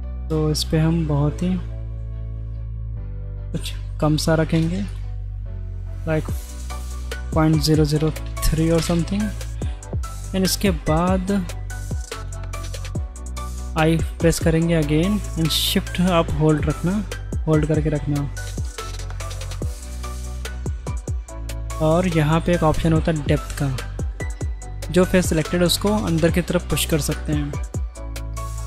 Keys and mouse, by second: 4.9-8.4 drag, 9.2 click, 10.4 shift+middle click, 13.7 i, 24.1 click, 27.1-28.6 middle drag.